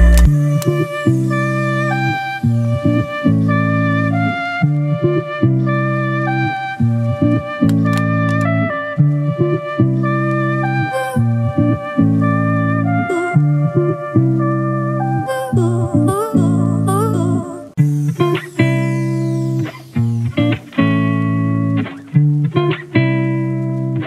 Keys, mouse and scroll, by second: 1.1 double click.